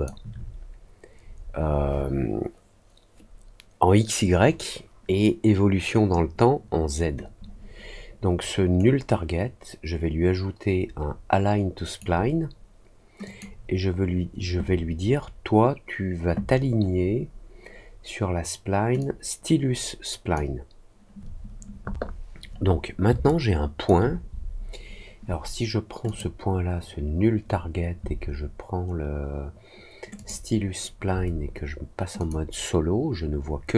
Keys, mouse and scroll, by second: 8.7-11.9 right drag, 13.2 click, 18.9-20.3 drag, 23.2 alt+click, 26.0 click, 30.1 ctrl+click, 32.1 click.